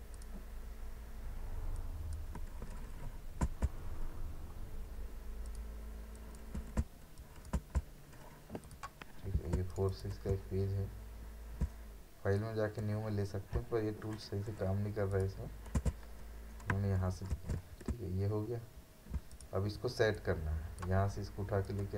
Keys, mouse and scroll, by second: 0.1-3.4 drag, 3.4 5, 5.4 click, 6.6 4, 7.2 click, 7.6 6, 8.6 click, 9.6 space, 9.7 right click, 9.9 click, 10.2 space, 10.7-11.1 alt+scroll down 1, 11.1-11.6 alt+scroll up 1, 12.4-15.8 drag, 15.8 d, 17.3 ctrl+d, 18.1 alt+scroll down 1, 18.4-18.8 alt+scroll up 1, 19.3-21.9 drag.